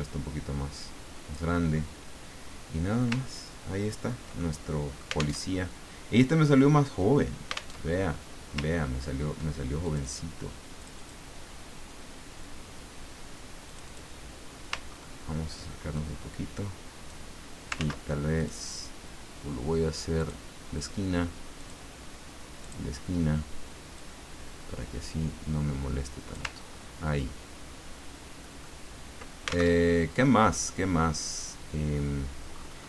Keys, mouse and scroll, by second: 3.3-4.1 ctrl+scroll down 4, 4.4 ctrl+middle click, 5.4 alt+Tab, 7.7 alt+Tab, 8.7-9.3 ctrl+scroll up 2, 9.8 ctrl+click, 10.8 click, 13.6 click, 14.9-15.5 ctrl+scroll up 2, 15.9-17.3 ctrl+drag, 17.8 ctrl+z, 18.4 click, 20.2 click, 21.6 click, 22.6 click, 23.9-26.5 drag, 26.6-27.2 ctrl+scroll down 4, 27.8-28.4 ctrl+scroll down 4, 28.6 ctrl+middle click, 29.7 ctrl+alt+Tab, 32.5-32.8 scroll up 2.